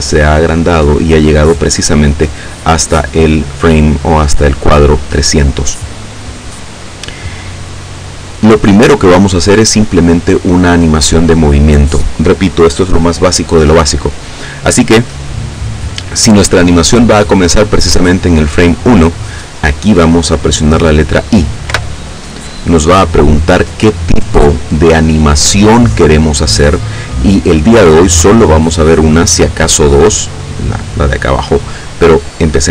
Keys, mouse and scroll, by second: 2.4-3.6 middle drag, 21.6 i.